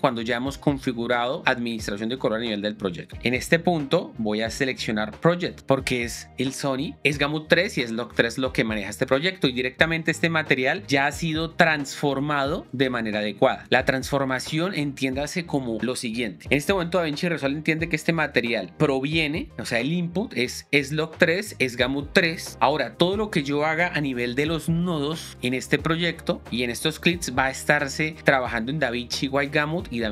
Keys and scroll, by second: 24.4 alt+s.